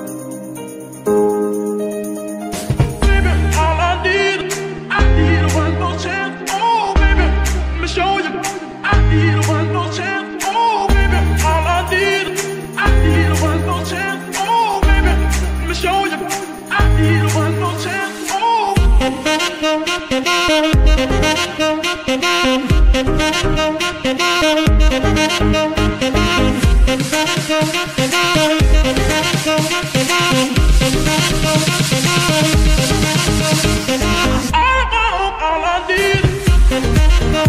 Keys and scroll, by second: 6.6 ctrl+Tab, 11.7 g, 11.8 y, 16.1 Escape, 17.6 r, 17.9 y, 20.5 Escape, 25.1 r, 25.2 z, 25.9 Escape, 28.1 r, 28.1 r, 28.9 Escape, 32.3 ctrl+Tab, 35.8 ctrl+Tab, 36.2 r, 36.4 r.